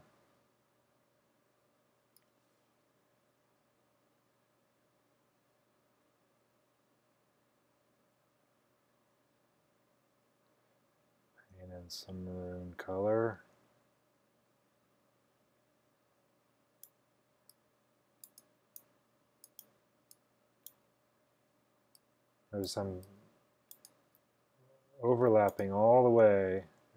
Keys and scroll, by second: 0.0-1.2 typing.